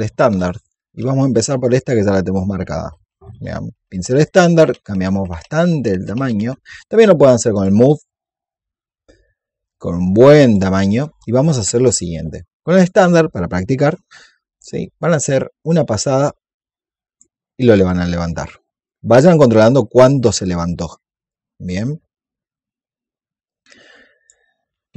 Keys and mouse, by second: 7.4 click, 9.6-11.7 drag, 12.6 click, 16.0-20.7 drag, 21.2-24.4 drag, 24.6 ctrl+z.